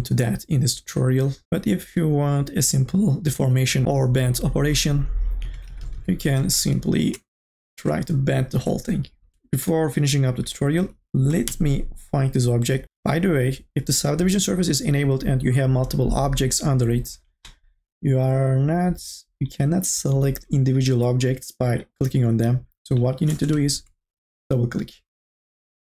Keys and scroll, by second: 5.7 ctrl+z, 9.3 r, 11.3 4, 11.5 e.